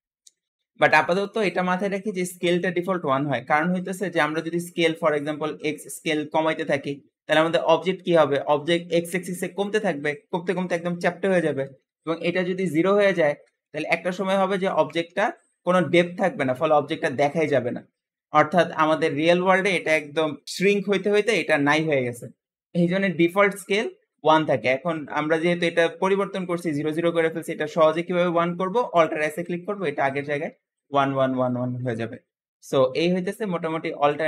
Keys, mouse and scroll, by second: 5.7-8.8 drag, 12.9-15.7 drag, 15.7-17.4 scroll up 6, 17.4-18.0 scroll down 2, 18.0-20.0 scroll down 7, 29.1 alt+s, 31.7-32.0 scroll up 2, 32.3 scroll up 2.